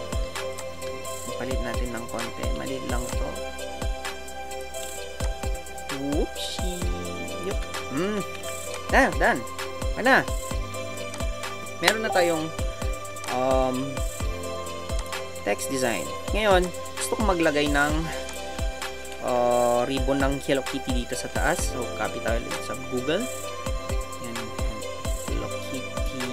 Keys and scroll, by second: 7.6 Return, 13.6 Down.